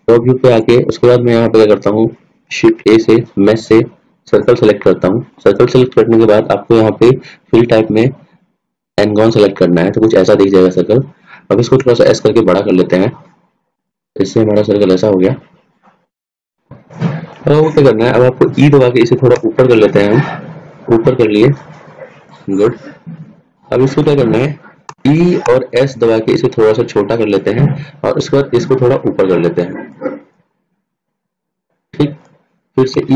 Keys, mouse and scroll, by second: 0.7-2.8 drag, 2.8 shift+a, 7.7-9.2 drag, 12.0 s, 14.9-16.1 middle drag, 17.0-20.5 middle drag, 19.8 e, 23.2-25.4 middle drag, 25.4 e, 30.4-31.9 drag.